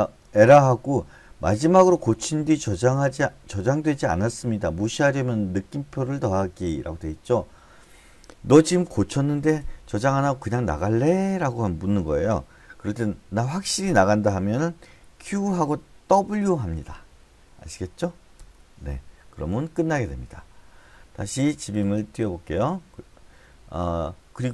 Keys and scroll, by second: 13.5 typing, 14.9-16.1 typing, 18.3 Return.